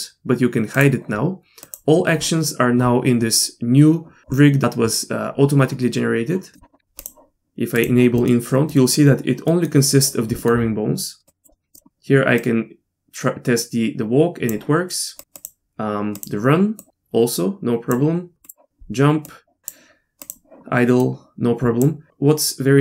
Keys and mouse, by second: 1.6 click, 6.5 middle click, 7.0 click, 7.7 click, 8.2 middle click, 8.7 middle click, 9.5 middle click, 10.4 middle click, 11.3 click, 11.7 click, 12.4-14.5 drag, 15.4 click, 16.2 click, 16.8 click, 18.4 click, 19.3 click, 20.2 click, 21.0 click.